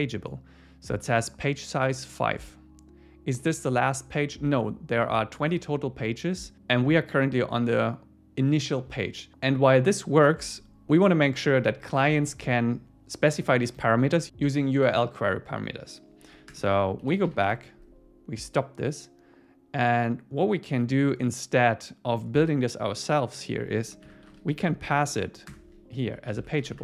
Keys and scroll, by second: 17.5 Return, 25.5 Return, 25.9 Down, 26.3 super+Right, 26.6 shift+super+Left.